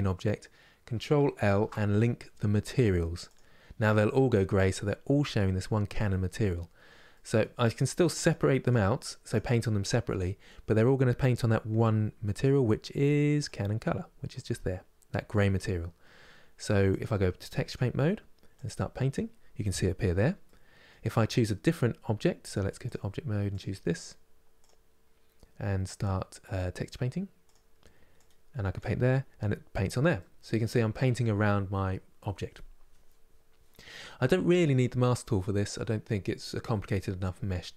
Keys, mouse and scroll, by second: 3.1 ctrl+l, 3.5-7.5 middle drag, 7.5 click, 8.0 click, 8.4 click, 9.0 click, 12.1-20.2 drag, 20.2-22.6 middle drag, 22.6 click, 27.2 click, 27.8-29.9 drag, 29.9-37.7 middle drag.